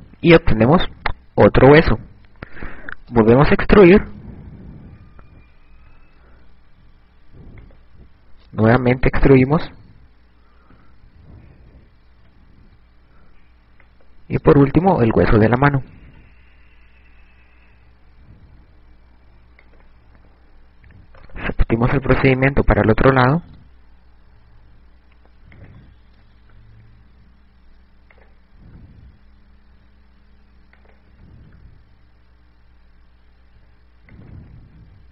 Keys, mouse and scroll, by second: 2.7 e, 8.3 click, 11.1 e, 14.5 click, 15.9 e, 19.1 click, 21.6 right click, 22.8 e, 26.3 click, 26.6 e, 28.9 click, 29.2 e, 31.6 click, 31.8 e, 35.0 click.